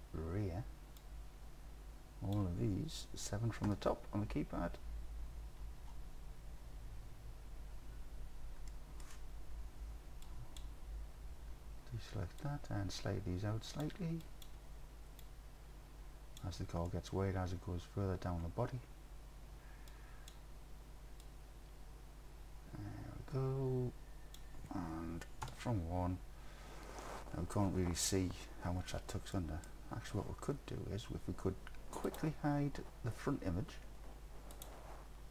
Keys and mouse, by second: 1.1-2.4 drag, 3.7 KP_7, 8.7 click, 10.3 ctrl+click, 12.6-13.8 drag, 14.3 ctrl+click, 15.3-16.4 drag, 16.9 click, 20.1 ctrl+click, 21.3-24.4 drag, 25.5 KP_1, 29.4 middle click, 34.6 click.